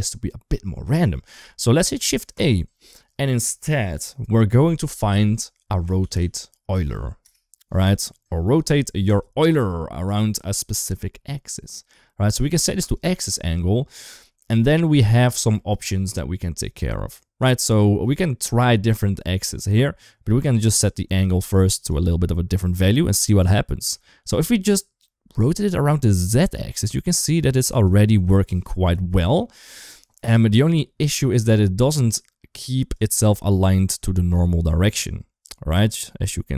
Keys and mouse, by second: 1.8 shift+a, 10.0 click, 10.6 shift+middle click, 12.6 click, 15.3 shift+middle click, 20.1-21.7 drag, 22.0-23.7 middle drag, 24.8-27.7 drag, 28.1 middle click, 28.7 KP_1, 30.2 ctrl+z, 31.4-32.5 drag, 32.7-36.5 drag.